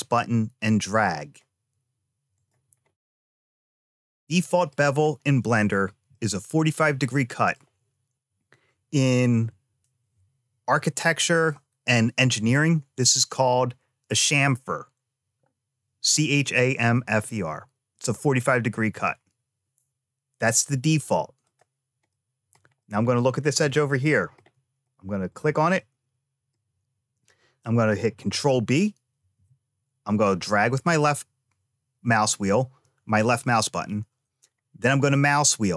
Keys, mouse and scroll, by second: 2.8-4.6 middle drag, 4.9-5.8 scroll up 1, 5.8 scroll up 1, 6.0 middle click, 7.0 shift+middle click, 21.3 click, 22.0 shift+middle click, 22.6 middle click, 23.7 shift+middle click, 25.1 click, 25.6 middle click, 29.0 ctrl+b.